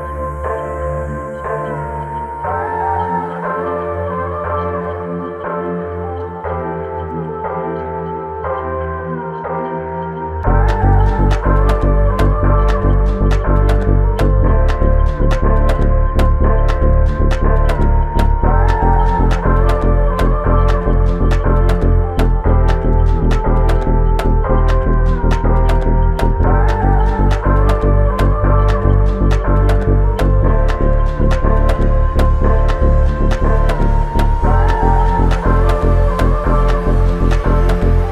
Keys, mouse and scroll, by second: 2.6 ctrl+alt+click, 4.6 alt+click, 7.2 alt+shift+click, 12.0 alt+click, 18.7 typing, 19.4 Return, 21.5 typing, 22.3 Return, 25.4 double click, 32.8 f, 33.1 double click.